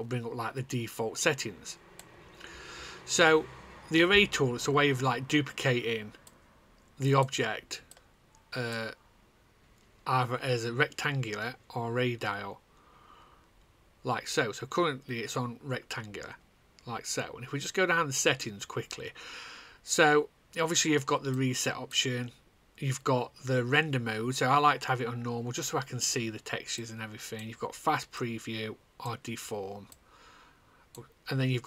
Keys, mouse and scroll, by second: 0.0 click, 1.2 click, 1.8 click, 6.8 click, 27.3 click.